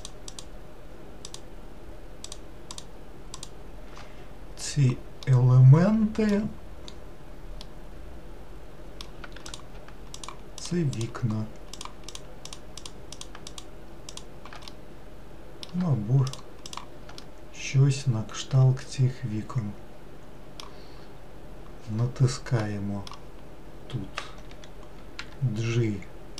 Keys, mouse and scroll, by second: 0.2 shift+Left, 1.5 shift+Left, 2.5 shift+Left, 3.5 shift+Left, 5.4-7.0 middle drag, 7.0-7.4 scroll up 1, 8.0-9.7 middle drag, 9.7 shift+click, 10.4 shift+click, 12.0 shift+click, 12.7 shift+click, 13.0 shift+click, 13.7 shift+click, 14.8-16.5 middle drag, 17.4-20.7 middle drag, 25.4 g.